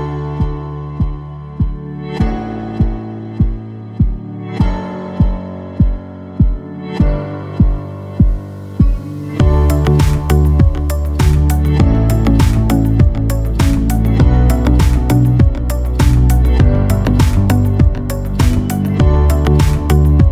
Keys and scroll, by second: 0.8 ctrl+shift+n, 1.5 ctrl+shift+KP_4, 1.7 ctrl+shift+KP_2, 2.0 ctrl+shift+Return, 2.8 Tab, 3.1 Tab.